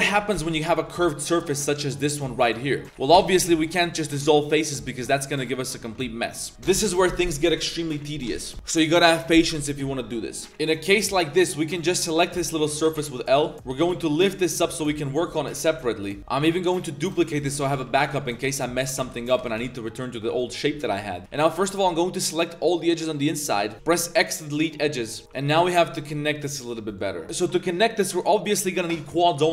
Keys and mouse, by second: 0.1 3, 0.2 a, 0.3 a, 0.4-0.8 drag, 1.3 b, 2.1 click, 3.1 x, 4.8 drag, 5.2 Tab, 5.3 drag, 5.9 Tab, 6.2-6.5 drag, 10.5 click, 10.9 b, 12.1-13.7 typing, 13.3 click, 15.7 KP_Decimal, 16.2 Tab, 16.2 b, 16.2 p, 16.4 shift+d, 17.5 g, 19.0 shift+s, 19.4 g, 21.2 c, 21.3 a, 21.4 a, 21.6 c, 23.7 click, 23.7 ctrl+z, 23.7 x, 24.8 1, 25.2 a, 25.2 2, 25.3 alt+click, 25.6 alt+shift+click, 25.9 1, 26.3-26.7 drag, 27.0 drag, 27.2 a.